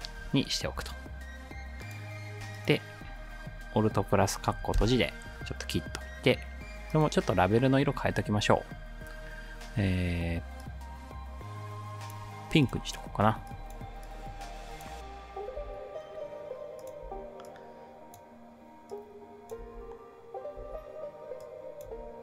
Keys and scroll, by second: 1.1-1.9 typing, 4.7 alt+], 15.6 space, 17.0 space, 19.7 space, 20.6 space, 21.9 space.